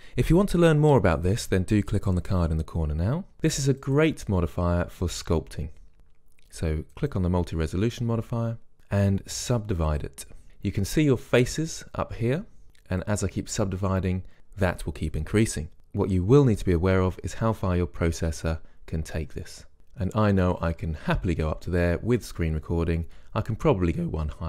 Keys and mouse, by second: 4.0-7.3 drag, 10.0-14.4 drag, 19.8-21.3 drag.